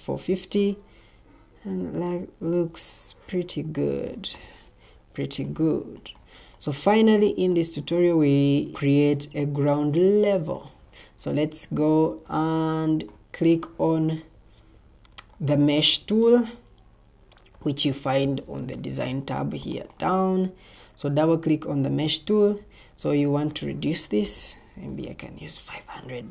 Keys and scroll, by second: 2.5 Escape, 4.8 o, 11.6 Escape, 23.8-24.8 typing.